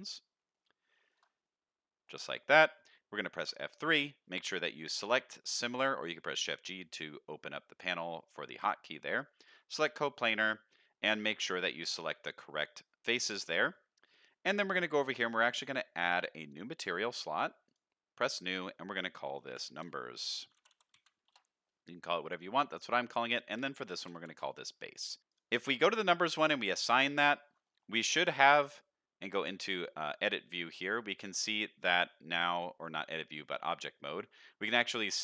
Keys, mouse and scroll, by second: 0.1 middle click, 1.1 shift+click, 1.4 middle click, 2.2 middle click, 3.4 F3, 11.3 click, 12.5 middle click, 13.3 shift+middle click, 16.3 click, 17.6 click, 18.3-21.3 drag, 22.3 click, 22.8-24.3 drag, 25.3 click, 26.4 click, 27.2 shift+middle click, 27.6 middle click, 28.3 Tab, 28.6 z, 30.1 shift+middle drag, 30.5 middle drag, 30.9 shift+middle click, 32.1-32.4 middle drag, 32.8 middle click, 34.0 middle click, 35.0 middle click.